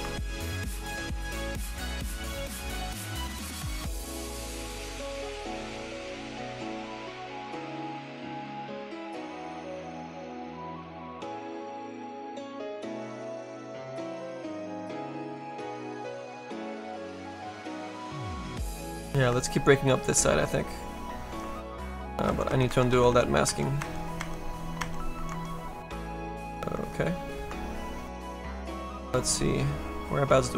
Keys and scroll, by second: 22.3 ctrl+z, 22.8 ctrl+z, 23.4 ctrl+z, 23.7 ctrl+z, 24.7 ctrl+z.